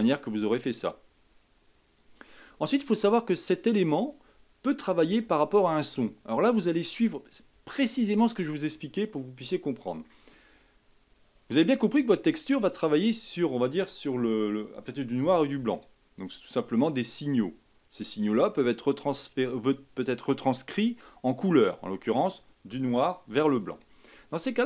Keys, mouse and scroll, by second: 2.7-4.0 middle drag, 4.0 click, 7.7-12.3 shift+middle drag.